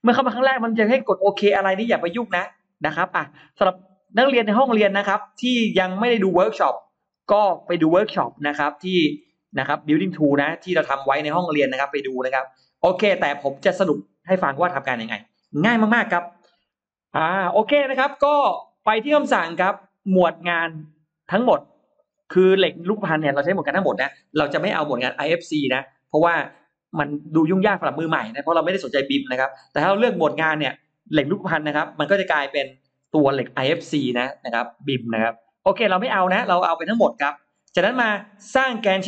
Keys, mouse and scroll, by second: 2.6 click, 4.4 click, 6.1-7.1 drag, 7.4-8.1 scroll down 2, 7.8 middle click, 8.7-9.0 scroll down 1, 9.0 middle click, 9.0-9.4 scroll up 1, 11.6-12.0 scroll up 1, 17.1-17.5 scroll down 2, 17.5 middle click, 18.0 scroll up 2, 20.3 click, 21.3 click, 31.0 click, 35.0-35.3 scroll up 2, 36.0 click.